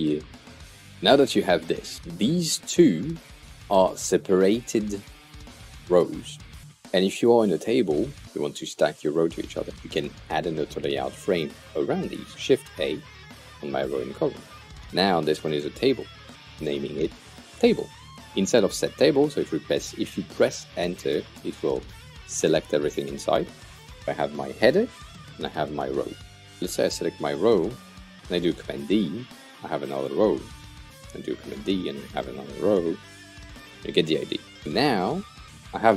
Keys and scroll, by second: 12.6 shift+a, 14.4 super+r, 15.0-16.3 typing, 21.0 Return, 28.8 super+d, 30.7 super+d, 32.2 super+d.